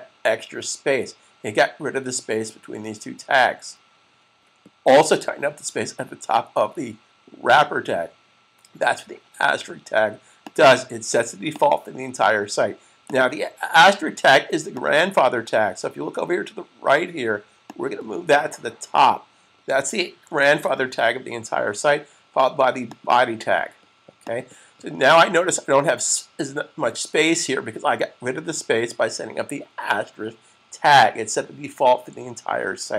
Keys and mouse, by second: 10.3 click, 17.6 click, 20.0 click, 20.2 super+s, 22.7 click.